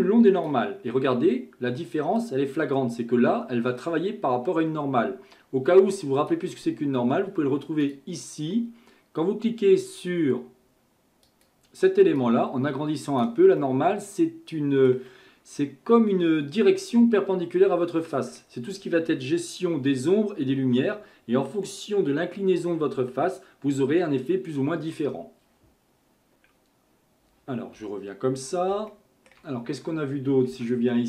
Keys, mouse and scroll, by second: 2.2 click, 7.8-11.1 drag, 13.6-16.7 middle drag, 18.0-21.1 middle drag, 25.9 shift+middle click, 27.8 KP_1, 28.5-28.9 scroll down 2, 28.9-30.5 shift+middle drag, 30.5 Tab.